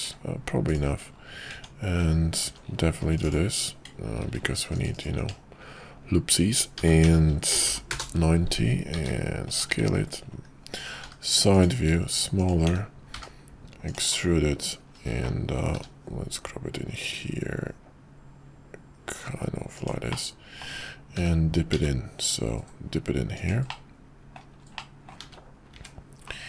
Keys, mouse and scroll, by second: 0.0 q, 1.5 Tab, 2.4 ctrl+r, 3.2 click, 5.1 Tab, 6.7 r, 8.9 s, 9.7 `, 11.0 g, 11.9 s, 12.7 s, 15.7 g, 20.3 middle click, 21.1 g, 23.9-24.5 middle drag, 24.8-25.2 middle drag, 25.2 `, 25.7 `.